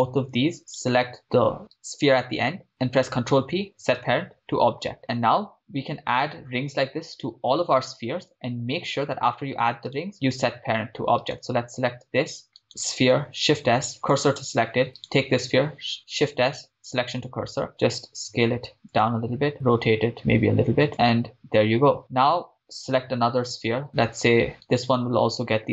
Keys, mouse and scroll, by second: 0.0-0.6 shift+right drag, 1.3 shift+right click, 3.0 ctrl+p, 5.0 scroll down 4, 10.1 right click, 11.6 shift+right click, 12.7 right click, 13.3 shift+s, 15.1 right click, 16.1 shift+s, 17.8 s, 19.0-19.5 drag, 19.5 r, 21.0 click, 22.8 click, 24.8 click, 24.8 right click.